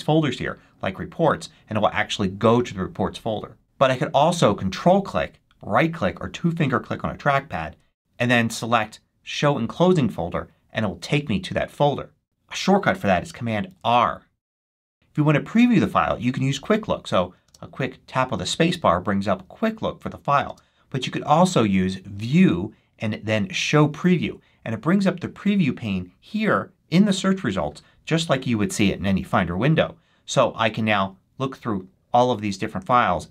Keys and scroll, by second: 13.6 super+r, 17.4 space, 20.4 space.